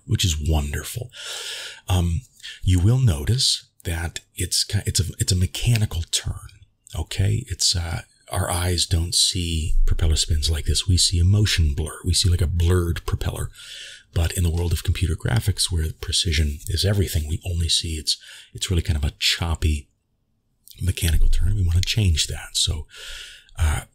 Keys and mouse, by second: 7.9-8.5 shift+middle drag, 18.4 click, 19.5 ctrl+s, 21.1-22.3 drag, 23.5-23.9 drag.